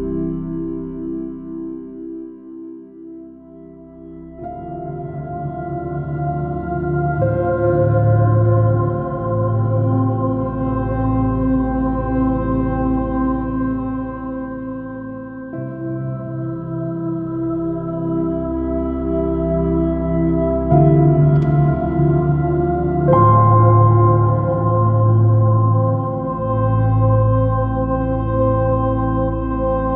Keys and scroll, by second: 0.5 space, 1.7 super+-, 5.5 alt+shift+super+i, 5.7 space, 6.7 m, 7.2 s, 10.2-11.2 typing, 15.0 alt+super+z, 16.8 x, 19.3 super+-, 20.9 super+i, 23.5 x, 23.8 super+z, 25.8 super+-, 28.2 super+i, 28.3 super+space, 29.2 super++, 29.3 super+space, 29.8 j.